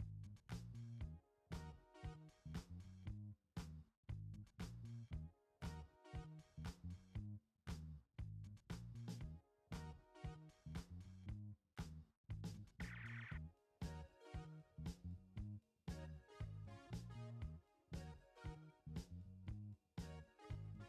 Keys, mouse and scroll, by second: 0.6 alt+scroll up 1, 1.5 space, 1.5 click, 2.0 space, 5.8 alt+click, 11.6-12.1 alt+scroll down 1, 12.8 space, 12.9 click, 14.0-14.4 alt+scroll up 1, 14.5 click, 15.1 space, 16.1 alt+scroll up 1, 18.4-19.7 alt+drag.